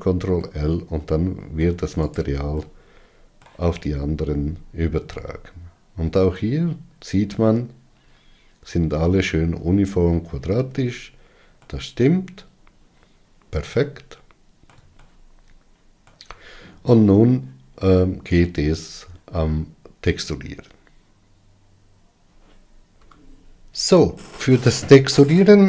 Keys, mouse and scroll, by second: 1.1-2.8 middle drag, 2.8 click, 3.3-4.5 middle drag, 4.5-5.4 scroll up 5, 5.8-11.4 middle drag, 11.4-12.3 scroll down 4, 12.3-15.3 middle drag, 15.7-25.6 shift+middle drag.